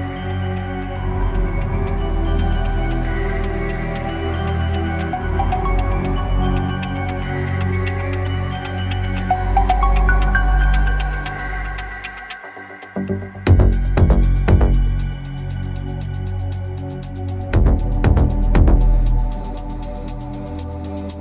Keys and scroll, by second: 15.5 space.